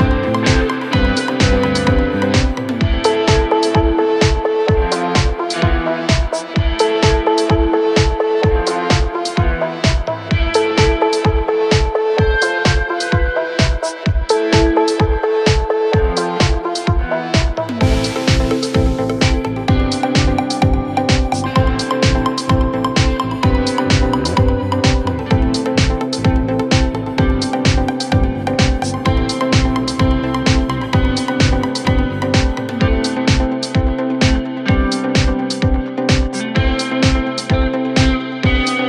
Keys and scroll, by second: 12.7-14.9 typing, 21.5 BackSpace, 22.8-27.4 typing.